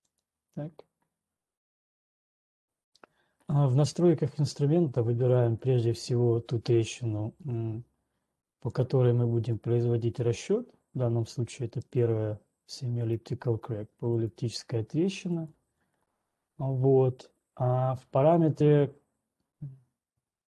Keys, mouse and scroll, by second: 0.2 click, 2.7 scroll, 3.2 scroll, 5.7 click, 6.2 click, 7.8 ctrl+1, 9.2 click, 10.2 click, 12.2 right click, 14.7 click.